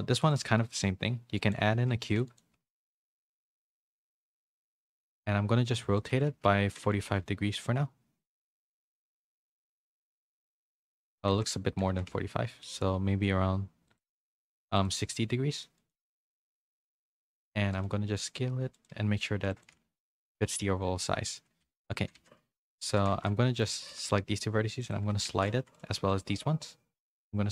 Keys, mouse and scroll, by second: 0.7 s, 1.9 s, 2.5 g, 3.2 r, 4.9 s, 6.3 ctrl+z, 6.9 r, 9.8 s, 11.4 ctrl+z, 11.9 r, 14.2 s, 14.9 g, 17.8 s, 19.0 g, 19.7 s, 20.3 Tab, 21.6 1, 21.9 a, 23.1 a, 23.1 c, 23.9 g, 24.9 a, 25.3 c, 26.0 g.